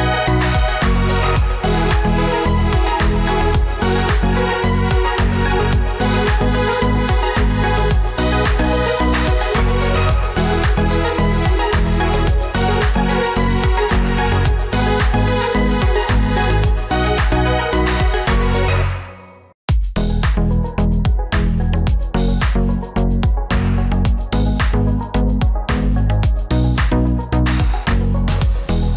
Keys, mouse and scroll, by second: 0.1 ctrl+-.